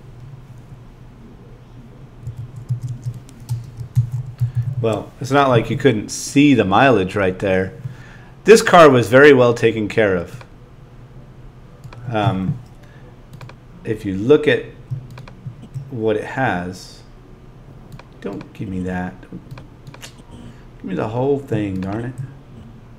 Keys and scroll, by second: 2.2 ,.